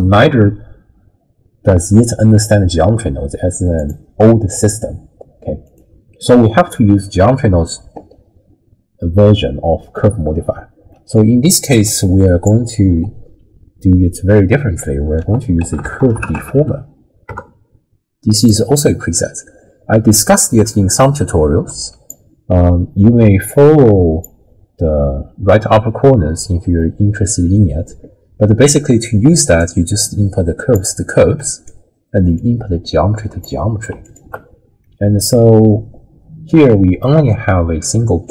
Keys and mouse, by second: 5.6 click, 6.7 middle click, 10.9 click, 11.5-12.4 drag, 14.6 ctrl+x, 15.2 ctrl+a, 21.7 click, 23.5 click, 26.8 middle click, 29.6-30.8 drag, 31.4 middle click, 32.4-33.4 drag, 34.0 alt+shift+click, 34.8-36.6 middle drag.